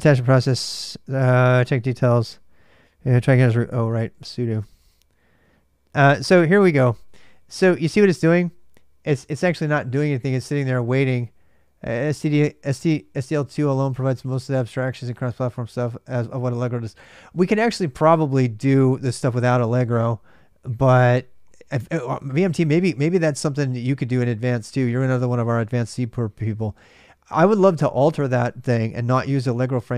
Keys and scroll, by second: 3.2 ctrl+[, 3.3-4.6 typing.